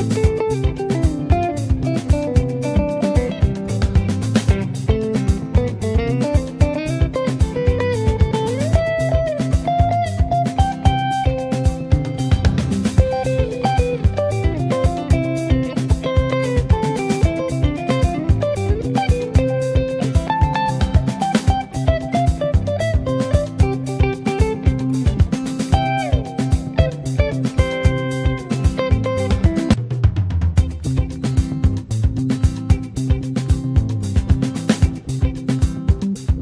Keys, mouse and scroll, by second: 1.9-3.5 middle drag, 3.5-4.5 scroll down 2, 4.5 click, 5.0 click, 6.0 ctrl+z, 6.5 click, 7.1 click, 8.5 ctrl+z, 9.1 click, 10.5 middle click, 10.8-11.4 scroll up 1, 11.4 click, 11.9 ctrl+z, 12.4 click, 12.9 click, 13.8 ctrl+z, 14.5 click, 15.4 click, 16.0 ctrl+z, 16.2 click, 17.7 ctrl+z, 18.1 Tab, 18.9 space, 24.2 space, 25.4-26.4 drag, 27.4-28.5 drag, 28.5 x, 29.9 click, 30.3 space, 30.6-33.1 drag.